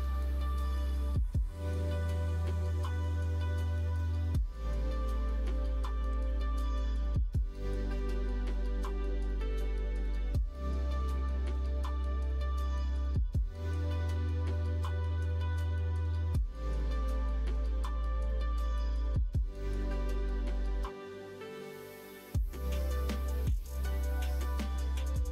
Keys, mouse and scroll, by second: 0.2-11.8 drag, 2.1 Right, 12.4 middle click, 13.1 middle click, 14.1 middle click, 15.9-21.8 drag, 23.0-24.1 middle drag, 24.5 middle click.